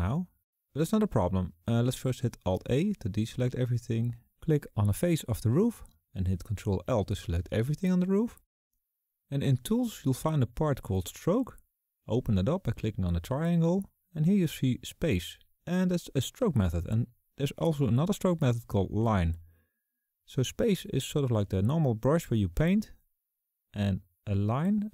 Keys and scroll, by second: 2.2 alt+a, 4.7 ctrl+shift+l.